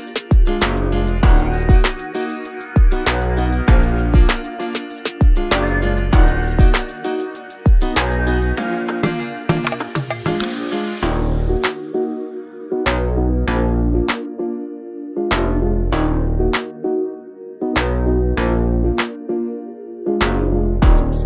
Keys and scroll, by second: 4.7 ctrl+t.